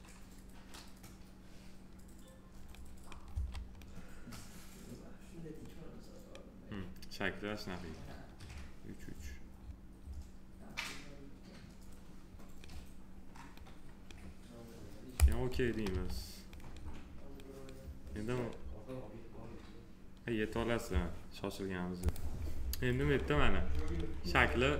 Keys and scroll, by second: 3.2 w, 15.9 2.